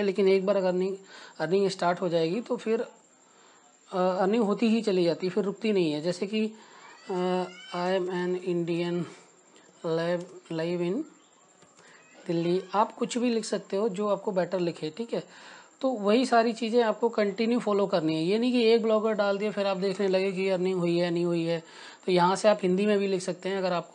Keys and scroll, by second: 9.5-15.7 typing, 19.8 n.